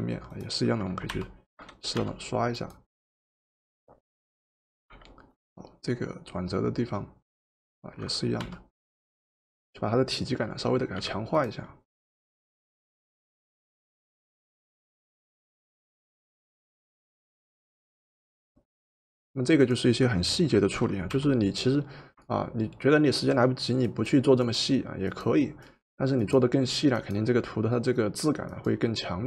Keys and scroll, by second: 1.2 o, 2.0 o, 5.1 v, 8.4 o, 11.1 v, 21.1 o.